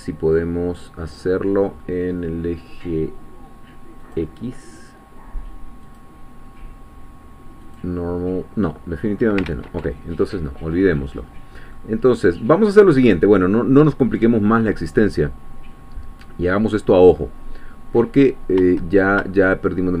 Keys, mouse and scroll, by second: 4.0 click, 5.9 click, 7.6 click, 9.5 ctrl+z, 10.6-11.0 scroll up 2, 11.2-11.7 scroll down 2, 11.7-14.4 middle drag, 14.4 scroll down 1, 14.5-16.3 scroll up 1, 16.3-17.0 scroll down 2, 17.0-17.4 scroll up 2, 17.4-18.9 middle drag.